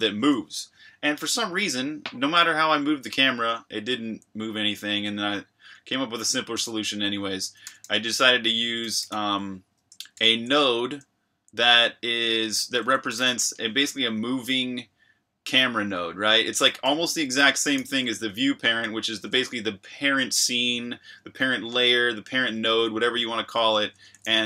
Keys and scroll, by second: 2.5 k, 2.7 k, 2.9 k, 4.0 j, 5.7 j, 7.4-13.7 typing, 17.0 Escape, 17.3 k, 17.7 shift+v, 23.9 Escape, 24.0 j.